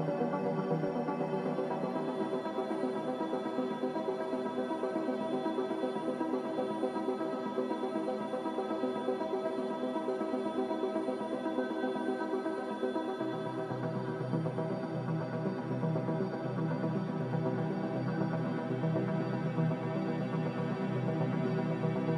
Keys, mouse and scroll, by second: 5.2 b, 14.0 a.